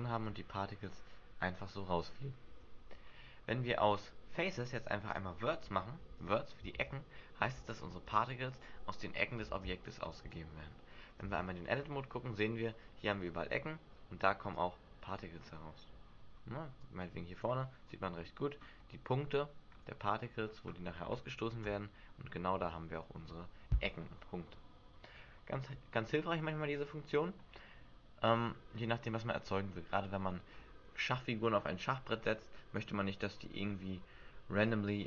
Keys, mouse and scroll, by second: 0.0 alt+a, 0.0 scroll up 1, 2.5 Escape, 3.1-4.0 scroll up 3, 5.1 click, 6.7 alt+a, 8.0 middle click, 9.4 alt+a, 11.2 Tab, 13.5 Tab, 14.6 click, 16.8 click, 17.8 middle click, 18.3-18.9 scroll up 4, 18.9 middle click, 19.7 scroll up 1, 20.2-20.7 scroll down 4, 21.7 Tab, 22.6 Tab.